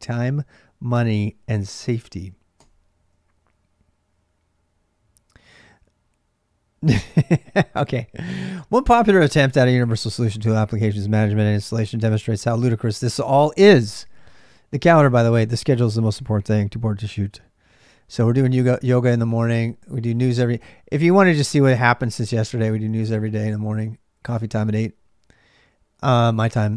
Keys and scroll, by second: 0.0-26.7 typing.